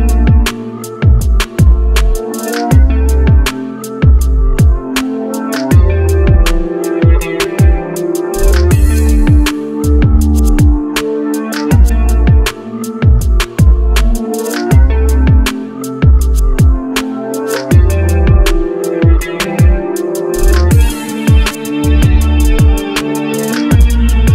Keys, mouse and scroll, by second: 4.3-5.8 drag, 6.2 click, 6.8 click, 7.5 Tab, 9.4-10.7 drag, 11.8 click, 12.5 Tab, 14.0-15.6 drag, 16.2 r, 17.7-19.2 drag, 19.9-21.5 drag, 21.8 click, 22.1 click, 22.4-23.4 scroll down 1, 23.4 scroll down 2, 23.7 click, 24.0 shift+click.